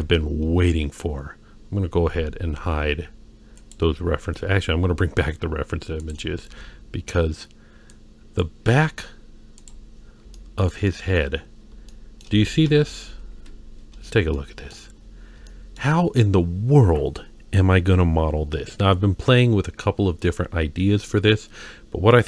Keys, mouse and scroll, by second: 2.1-3.6 scroll up 3, 3.6 click, 6.0 click, 6.5 z, 8.6 z, 10.1 scroll down 1, 10.4-10.7 shift+middle drag, 10.9 middle click, 11.4-11.7 scroll up 2, 11.9-12.2 shift+middle drag, 12.7 KP_3, 13.2 KP_1, 13.4 KP_1, 14.4-14.7 shift+middle drag, 14.9-15.4 scroll up 2, 15.5 shift+middle drag, 21.2-22.2 scroll down 2.